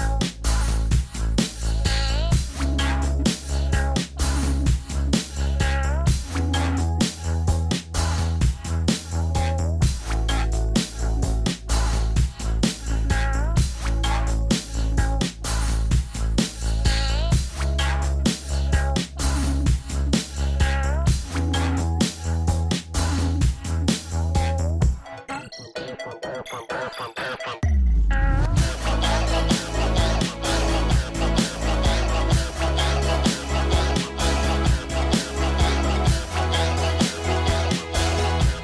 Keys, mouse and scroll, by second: 6.6-7.2 scroll up 1, 7.4 scroll down 1, 7.4 middle click, 11.5 middle click, 11.7 scroll down 1, 13.7 scroll down 1, 13.8 scroll up 1, 13.9 middle click, 14.8 scroll down 1, 15.1 middle click, 17.9 middle click, 18.0 right click, 19.5 middle click, 20.0 scroll down 1, 30.6 scroll down 1, 30.7 scroll up 1, 31.8 scroll down 1, 32.5 middle click, 33.0 scroll up 1.